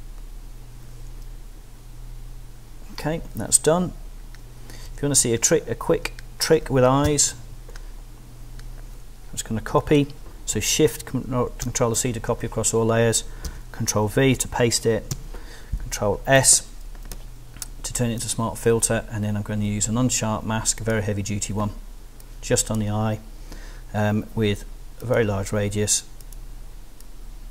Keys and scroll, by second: 4.9 z, 7.0 l, 11.6 shift+super+c, 13.4 super+v, 14.0 ctrl+super+v, 15.1 ctrl+shift+super+s.